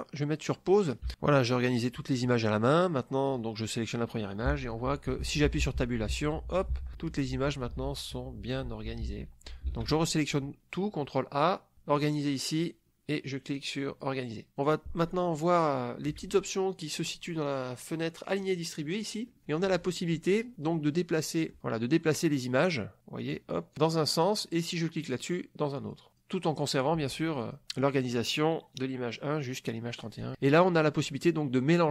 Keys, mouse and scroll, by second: 1.1 Tab, 3.2 click, 4.5 Tab, 6.1 Tab, 9.7 ctrl+a, 11.9 click, 13.5-14.2 drag, 18.4 click, 21.1 middle click, 22.5 click, 23.2 click, 23.7 click, 25.2 click, 25.7 click, 26.6 click, 27.4 click, 30.1 click.